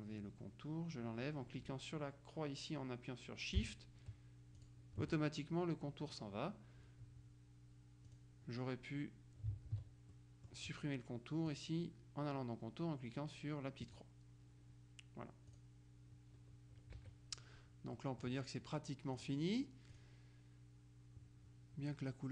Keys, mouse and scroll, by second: 4.7 shift+click, 8.2 click, 9.8 ctrl+z, 10.2 ctrl+middle click, 11.6 click, 14.0 click, 15.6 click, 17.0 KP_Subtract, 18.0 click, 19.2 click, 20.0 click.